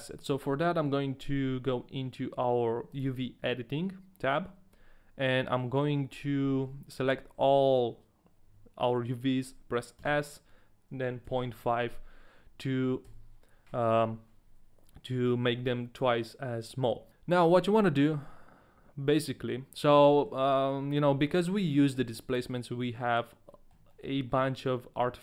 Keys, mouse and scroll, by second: 17.1 shift+middle click, 17.1-17.7 scroll up 1, 18.2 middle click, 20.3 shift+middle click, 20.3-21.1 scroll up 1, 21.1 middle click, 21.4 scroll up 2, 21.6 middle click, 22.3 middle click, 22.5 middle click, 23.5 middle click, 24.1 shift+middle click, 24.4 middle click, 24.4-24.8 scroll up 1.